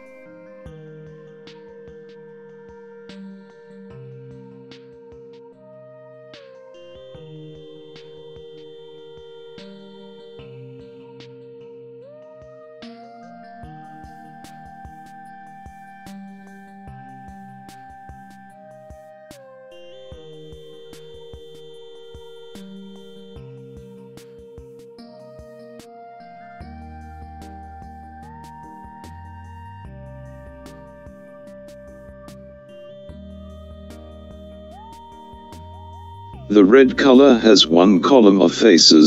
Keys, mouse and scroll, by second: 0.3 click, 5.9 click, 7.4 click, 9.1 click, 11.4 click, 12.4-13.5 drag, 15.8 click, 16.1 click, 16.4-17.5 drag, 17.9 l, 20.1-21.3 drag, 24.8-25.9 drag, 26.1 e, 27.5-28.5 middle drag, 29.6-30.7 middle drag, 32.1-33.2 middle drag.